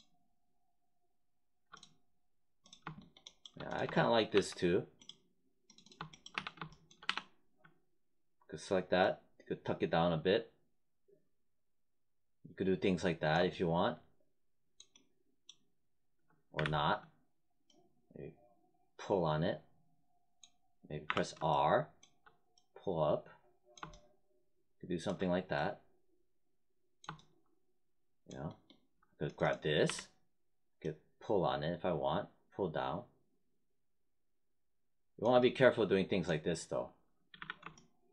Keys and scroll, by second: 4.3 1, 6.3 3, 7.0 w, 16.5 z, 21.0 r, 29.8 w, 37.3 z.